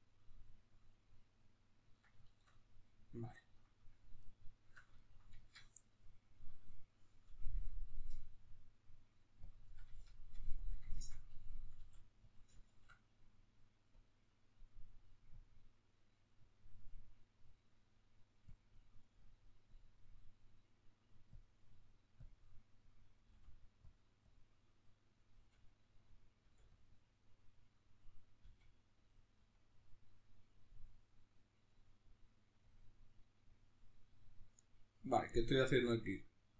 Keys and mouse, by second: 0.7 click, 1.3-9.2 ctrl+middle drag, 9.2 click, 9.8-14.3 shift+middle drag, 11.5 f, 14.3-23.7 drag, 23.0 f, 24.3-26.1 drag, 25.1 f, 27.3-29.1 drag, 28.1 f, 30.5-36.5 drag.